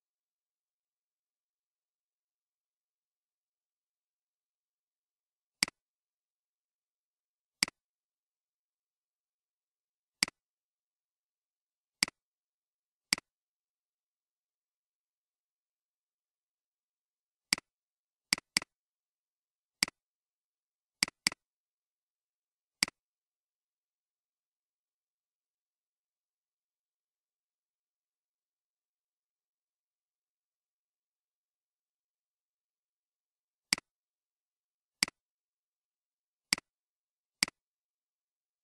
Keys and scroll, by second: 0.8-2.2 typing, 3.7 BackSpace, 5.7-6.6 typing.